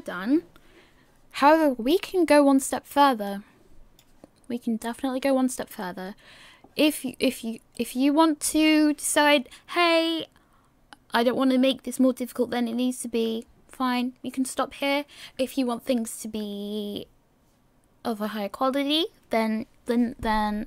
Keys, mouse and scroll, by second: 3.3 click, 6.0-8.9 scroll down 3.